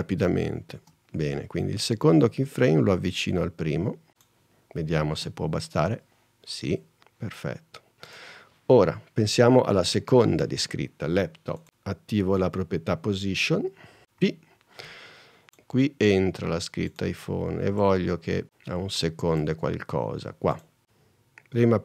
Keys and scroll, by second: 0.8 space, 5.3 space, 14.3 p, 20.8 super+z.